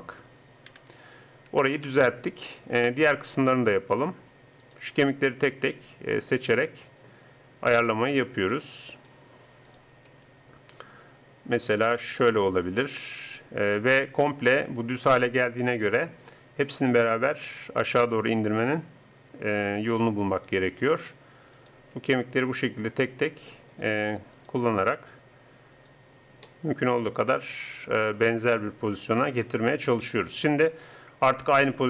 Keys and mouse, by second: 0.7 KP_3, 4.7 click, 5.5 r, 6.5 middle click, 8.1 r, 10.1 r, 17.1 r, 21.5-23.4 right drag, 22.0 r, 24.3 right click, 24.8 r, 26.4 middle click, 29.5 KP_0.